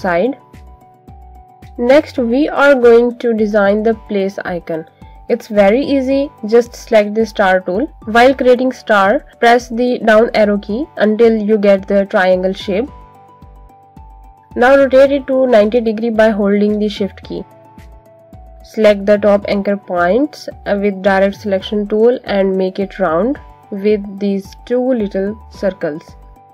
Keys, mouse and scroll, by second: 0.4 click, 1.5 click, 3.0 z, 3.8 right click, 6.6 click, 9.0 Down, 15.7 click, 20.0 click.